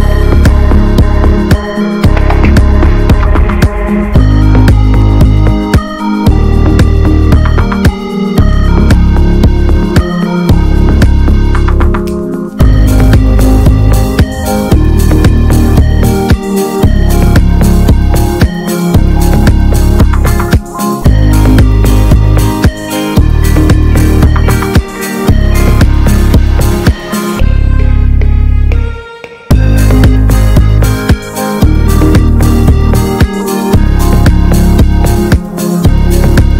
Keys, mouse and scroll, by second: 0.7 g, 3.7-5.3 drag, 8.1 click, 8.8 l, 9.8 click, 10.3 click, 10.5 l, 11.3 click, 12.5 click, 13.5 click, 14.3 Tab, 14.7 click, 19.5-19.8 right drag, 19.8 drag, 20.1 scroll down 3, 20.2-20.6 middle drag, 20.6 ctrl+s, 20.8 click, 21.0 ctrl+a, 21.7-22.8 middle drag, 22.8-23.2 drag, 23.4-23.9 middle drag, 23.9 ctrl+s, 24.2 click, 25.2 click, 25.7 scroll up 1, 26.0-28.1 middle drag, 28.1-36.5 drag.